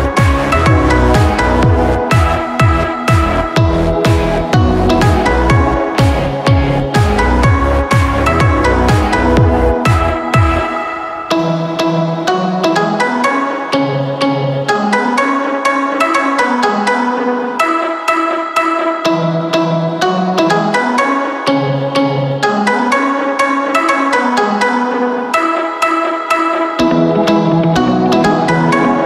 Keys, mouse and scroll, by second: 1.7-2.4 scroll down 1, 2.4-3.6 shift+middle drag, 3.6 Tab, 5.6 middle click, 5.9 click, 6.2-7.7 middle drag, 7.7 ctrl+a, 13.6 scroll up 2, 14.0 click, 14.5 Tab, 16.7 click, 18.2 i, 21.7 e, 27.1 scroll up 1, 27.4-27.9 scroll down 1, 27.9 Tab, 28.6-29.0 middle drag.